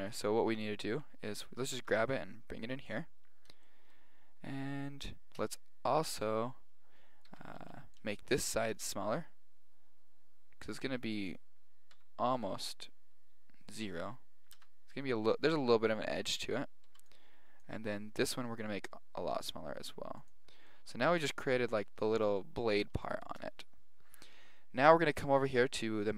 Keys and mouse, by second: 0.9 a, 1.3 a, 1.8 g, 3.4-5.9 middle drag, 7.3 a, 7.7 b, 8.9 s, 12.0 s, 14.6 a, 16.9 b, 18.3 s, 20.7-24.7 middle drag.